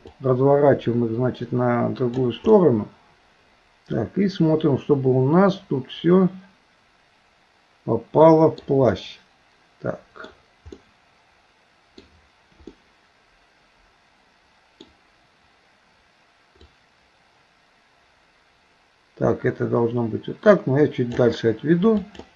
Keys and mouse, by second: 0.2-2.2 drag, 2.6-8.6 middle drag, 8.9-10.3 middle drag, 10.8-12.1 middle drag, 12.8-14.8 middle drag, 16.8-21.2 drag, 22.1 click.